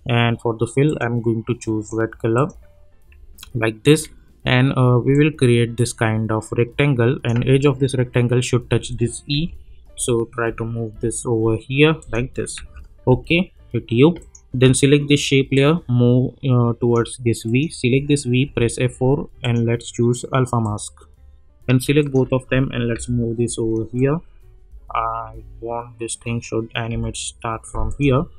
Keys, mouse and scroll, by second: 3.3-3.6 alt+scroll up 1, 5.1-7.3 drag, 11.4 Right, 12.0 click, 12.6 u, 13.1 u, 14.2-17.1 drag, 18.4 F4, 19.4 click, 22.9 [, 23.9-26.4 drag, 26.9 [, 27.9 click.